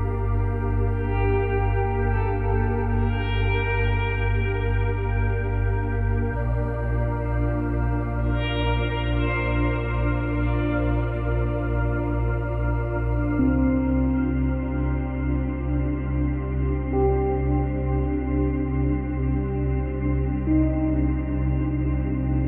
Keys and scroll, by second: 2.6 ctrl+z, 3.4 ctrl+z, 4.9 ctrl+y, 10.0 Delete, 17.3 F9.